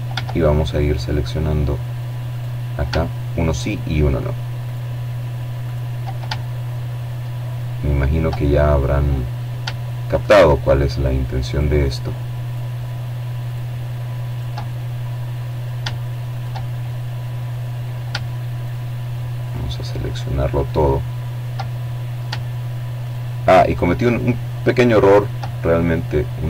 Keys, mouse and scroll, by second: 0.0 right click, 1.3 shift+right click, 2.3 right click, 3.3 right click, 4.1-5.2 shift+middle drag, 5.2 click, 6.2 middle click, 7.1 shift+click, 8.0 shift+right click, 9.2 right click, 10.2 right click, 11.2 right click, 12.0 right click, 12.4 middle click, 14.0 shift+right click, 14.8-16.2 middle drag, 16.4 shift+right click, 17.2 right click, 18.4 right click, 19.4 right click, 19.6 middle click, 20.8 shift+right click, 21.8 right click, 22.8 right click, 23.2 middle click, 24.9 shift+right click, 25.8 right click.